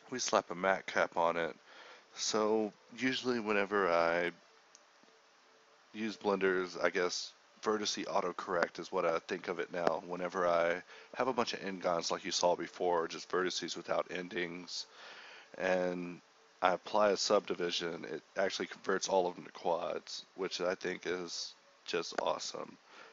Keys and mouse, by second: 1.6 drag, 2.9 ctrl+z, 6.2-21.0 drag, 21.7-22.5 drag, 22.5 ], 22.5 [.